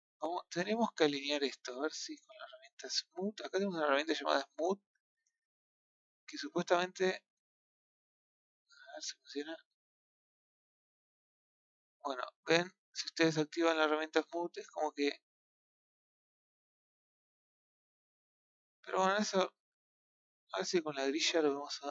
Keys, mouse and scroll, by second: 0.4 middle click, 1.4 click, 1.9 shift+click, 4.0 click, 4.7-6.3 middle drag, 6.3 shift+click, 6.9 shift+click, 7.2 middle click, 7.9 click, 8.3 shift+click, 10.8 click, 12.7-14.4 middle drag, 14.4-16.5 drag, 16.5-20.3 middle drag, 20.3 KP_1, 21.6-21.9 scroll up 5.